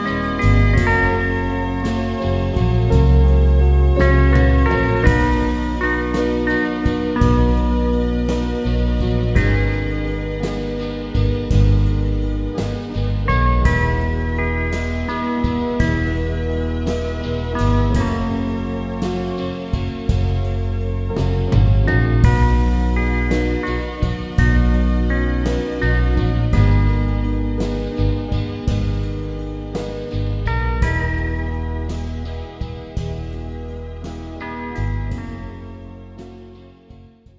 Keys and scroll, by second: 2.2 Return.